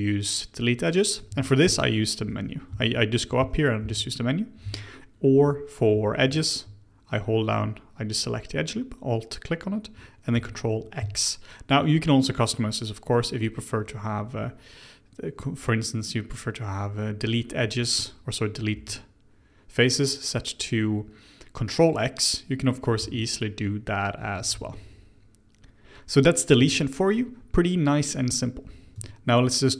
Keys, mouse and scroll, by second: 1.2 ctrl+z, 1.6 x, 2.3 ctrl+z, 2.6 x, 3.3 ctrl+z, 3.8 x, 4.6 ctrl+z, 5.9 2, 6.4 alt+click, 10.3 ctrl+x, 10.9 ctrl+z, 17.7 3, 17.9 click, 18.7 x, 23.0 ctrl+x, 24.3 ctrl+z, 24.5 ctrl+z, 25.8 Tab, 26.5 Tab, 28.9 Tab.